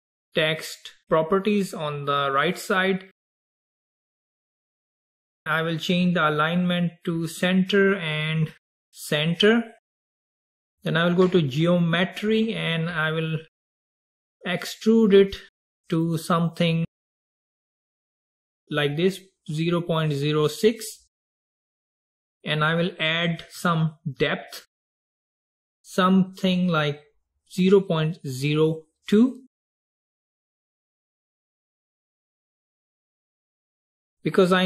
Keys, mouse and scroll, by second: 1.5 click, 4.6-6.4 scroll down 4, 6.4-11.3 drag, 11.9-13.9 drag, 13.9-15.9 middle drag, 15.9-20.2 drag, 21.4-24.9 scroll down 4, 24.9-28.3 drag, 31.1-34.2 middle drag.